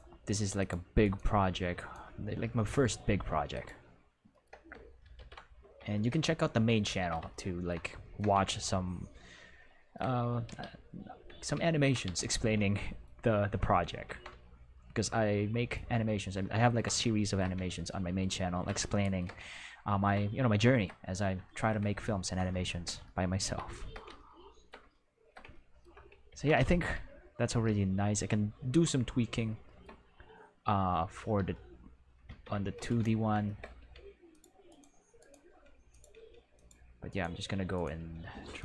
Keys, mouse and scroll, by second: 0.0 g, 0.5 click, 1.0 right click, 1.7 right click, 3.1 g, 3.5 click, 5.1 ctrl+s, 10.4 q, 12.0 q, 13.9 ctrl+Tab, 22.1 ctrl+middle click, 22.6-22.9 shift+middle drag, 23.0 ctrl+middle click, 25.0 shift+middle click, 25.6 ctrl+middle click, 26.3 ctrl+s, 26.6-27.6 shift+middle drag, 27.6 q, 30.2-31.2 middle drag, 31.3 q, 32.2 ctrl+Tab, 33.1 middle click, 33.8 r, 34.3 click, 34.6 right click, 35.1 right click, 35.4 r, 35.9 click, 35.9 right click, 36.0 r, 36.1 r, 36.5 click, 37.1 right click, 37.7 right click, 37.9 r, 38.5 click.